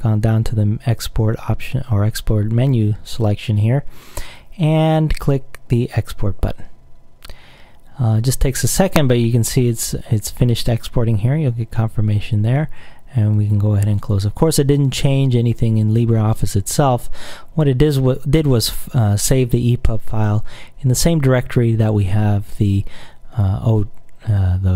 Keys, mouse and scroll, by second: 5.9 click, 13.5 click.